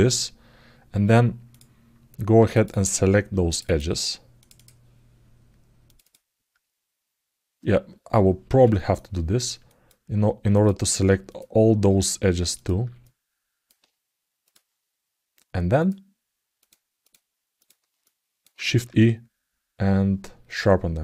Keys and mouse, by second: 1.3 click, 2.3 click, 3.3 shift+click, 3.4 shift+click, 4.1 shift+click, 4.3 shift+click, 5.8 shift+click, 8.7 alt+middle click, 9.4 alt+middle click, 10.3 shift+click, 11.0 shift+click, 12.3 shift+click, 12.8 alt+middle click, 14.2 shift+click, 15.5 shift+click, 16.8 shift+click, 17.3 shift+click, 17.8 alt+middle click.